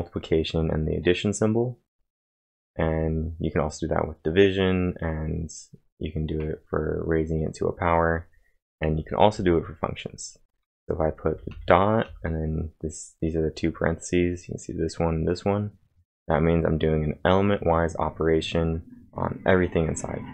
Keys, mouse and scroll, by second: 2.6 typing, 8.8 typing.